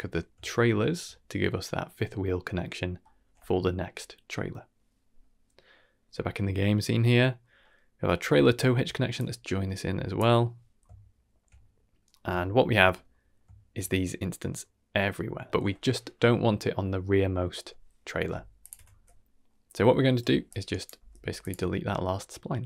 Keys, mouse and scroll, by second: 0.4-0.9 shift+middle drag, 6.0 click, 7.1-7.6 scroll down 1, 7.6 middle click, 8.4 middle click, 9.1-10.1 drag, 10.7 scroll down 1, 10.9-11.4 shift+middle drag, 11.5-12.0 middle drag, 12.1 scroll down 2, 12.3-12.8 shift+middle drag, 12.8 scroll up 2, 13.0 middle drag, 13.5 shift+middle drag, 14.1-14.5 middle drag, 15.5 shift+middle click, 19.4 middle click, 19.8 middle click, 20.4 click, 20.9 g, 21.7-22.6 shift+middle drag.